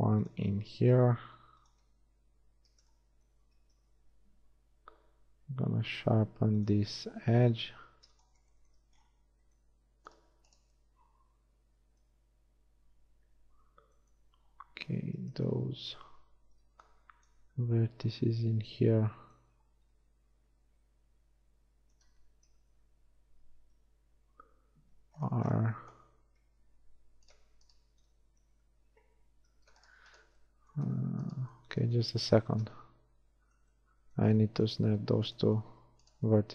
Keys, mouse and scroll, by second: 0.1 ctrl+r, 2.1 Tab, 3.9 Tab, 5.2 ctrl+r, 13.4 KP_1, 14.7 a, 15.5 z, 16.7 b, 17.5 z, 22.8 ctrl+KP_3, 23.9 KP_1, 24.5 ctrl+KP_1, 28.7 ctrl+shift+z, 29.1 ctrl+shift+z.